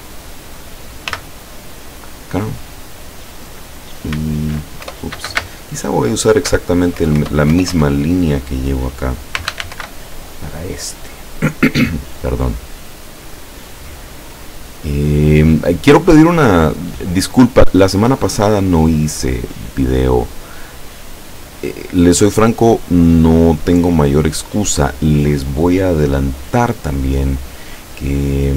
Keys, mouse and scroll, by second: 1.2 ., 4.2 m, 4.9 BackSpace, 5.5 space, 7.1 BackSpace, 9.2-10.3 typing, 13.4 click, 15.3-24.0 drag.